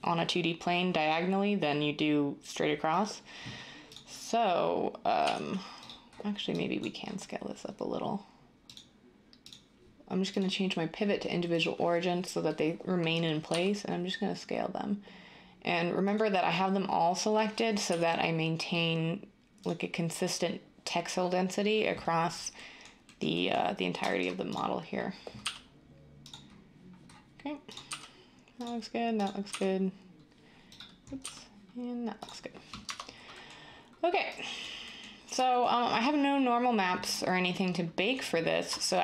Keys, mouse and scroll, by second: 5.2 g, 13.4 s, 17.8 g, 25.4 g, 27.8 g, 29.4 g, 31.2 g, 32.8 Tab.